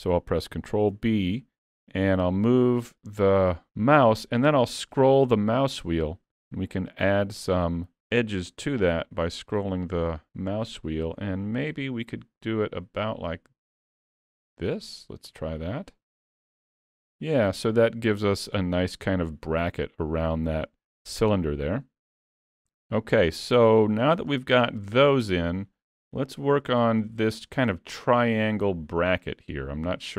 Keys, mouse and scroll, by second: 1.0 ctrl+b, 14.9 scroll down 3, 15.3 middle click, 16.4 Tab, 16.7-17.1 scroll down 3, 17.1 alt+a, 17.6 middle click, 20.1 middle click, 21.3 middle click, 23.2-23.6 scroll down 3, 23.6 middle click, 24.2 shift+middle click, 24.8 middle click, 25.2 shift+middle click, 26.0 scroll down 2, 26.4 shift+middle click.